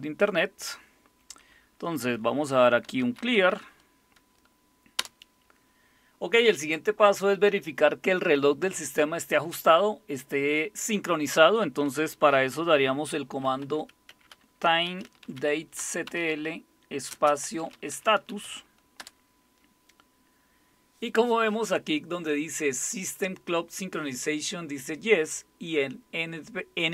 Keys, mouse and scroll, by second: 2.6-4.0 typing, 5.0 Return, 13.2-19.0 typing.